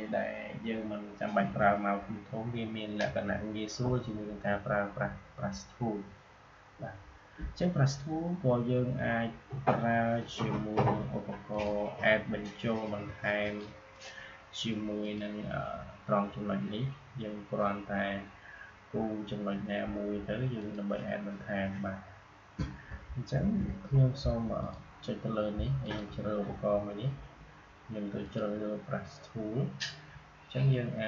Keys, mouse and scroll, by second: 10.3 click, 20.5 click, 23.3 ctrl+z, 24.5-31.0 drag.